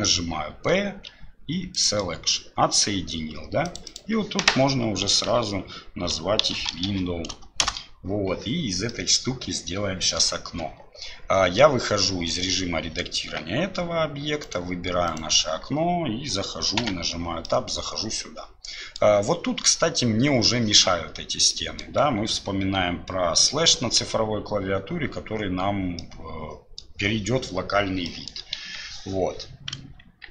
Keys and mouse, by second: 3.7-8.2 drag, 8.9-10.2 middle drag, 17.4-19.0 middle drag, 21.5 click, 26.0 click, 28.1 click, 28.6 KP_1, 29.7 KP_3.